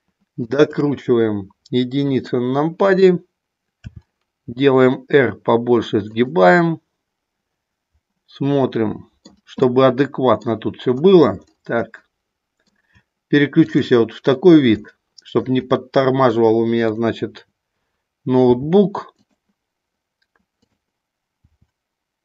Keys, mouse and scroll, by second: 0.5 shift+click, 2.1 KP_1, 3.8 r, 6.3 click, 6.6-9.3 middle drag, 9.8 middle click, 12.2 shift+middle click, 13.6 click, 14.8 shift+middle click, 18.4 r, 19.1 click, 21.4 r.